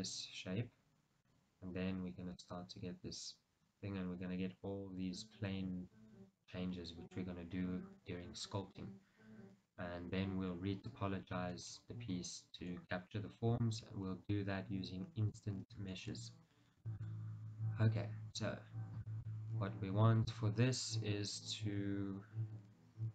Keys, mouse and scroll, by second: 11.3-11.7 scroll up 1, 12.1-12.8 scroll down 1, 12.8 shift+middle click, 16.0-23.1 middle drag, 16.7 scroll up 2, 18.8-19.2 scroll down 2.